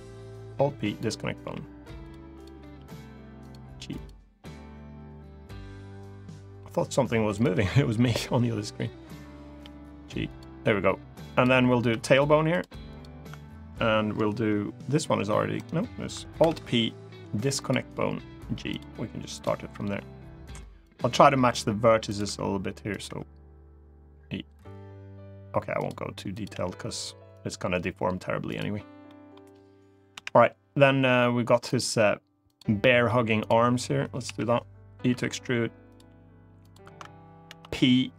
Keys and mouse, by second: 1.1 g, 1.7 click, 2.5 g, 3.1 click, 3.8-4.9 drag, 4.9 g, 7.1 click, 9.3 g, 10.0 click, 11.0 click, 11.6 e, 12.2 click, 12.7 click, 14.7 g, 15.3 right click, 16.1 alt+p, 17.6 g, 18.4 click, 19.6 g, 20.5 click, 20.8 e, 21.8 click, 22.0 e, 22.6 click, 22.8 e, 25.5 click, 26.2 g, 27.1-28.3 drag, 28.8 middle click, 29.8 KP_1, 31.5 click, 32.3 click, 32.5 middle click, 34.0 KP_1, 34.8 e, 35.6 click, 36.4 click, 37.2 p.